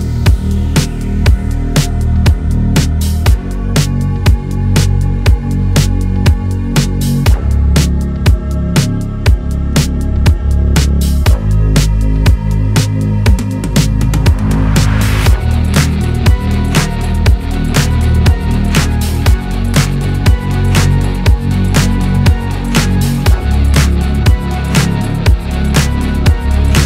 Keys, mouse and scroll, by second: 1.5 click, 2.2-4.1 middle drag, 4.1 alt+g, 4.5 alt+r, 4.5-5.2 middle drag, 5.2 scroll down 1, 5.3 click, 6.8 r, 8.1 KP_0, 8.5-9.4 scroll up 3, 9.9-10.3 middle drag, 10.3 click, 11.9 middle click, 12.5 click, 13.1 ctrl+z, 13.9 click, 14.2 click, 14.9-15.4 scroll up 1, 15.4 r, 16.8 r, 20.7 r, 22.7 click, 23.7 r, 25.9 r.